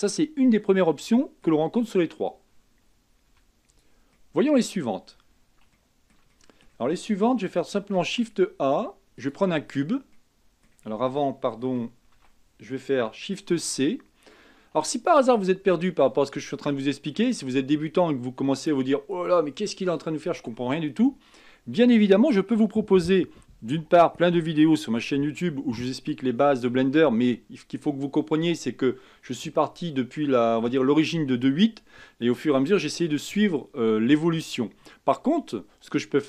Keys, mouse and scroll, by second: 3.3 x, 4.3-7.9 middle drag, 7.9 shift+a, 9.8-10.2 scroll down 3, 10.2-12.2 middle drag, 12.2 ctrl+z, 13.6 shift+c, 14.9-15.8 shift+middle drag, 15.8 scroll down 1, 16.1-16.8 scroll up 5, 16.8-19.9 shift+middle drag.